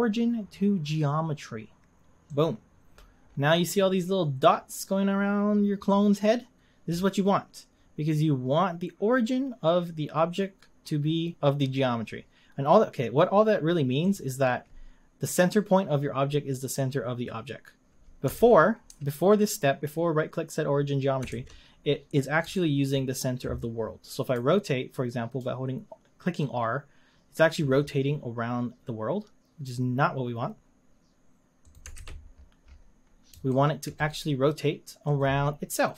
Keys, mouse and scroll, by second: 3.2-4.0 scroll up 7, 5.7-6.5 scroll down 4, 14.1 click, 18.4 ctrl+z, 21.3 ctrl+z, 21.8-22.6 scroll down 7, 22.6-24.4 shift+middle drag, 24.4 r, 32.0 ctrl+z, 32.3-33.5 scroll up 9, 33.5-33.9 shift+middle drag, 33.9-35.1 right drag, 35.1 click.